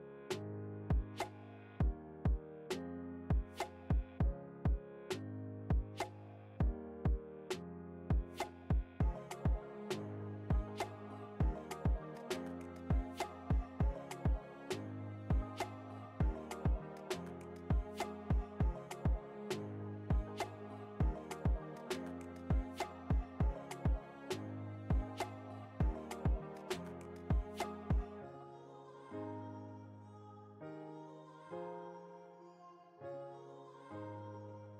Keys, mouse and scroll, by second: 2.2 Return, 2.5-7.5 drag, 7.4 ctrl+t, 8.4-17.1 drag, 17.1 Return, 17.9 click, 23.8 click, 25.8-29.5 typing, 31.0 click.